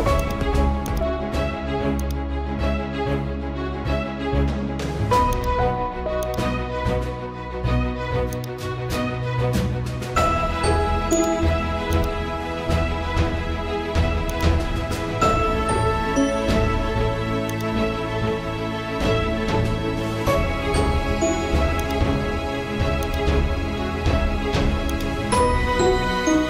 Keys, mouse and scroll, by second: 7.9 right click, 8.3 click, 11.2-21.8 drag, 15.5 typing, 16.7 typing, 21.8 click, 26.3-26.4 scroll down 1.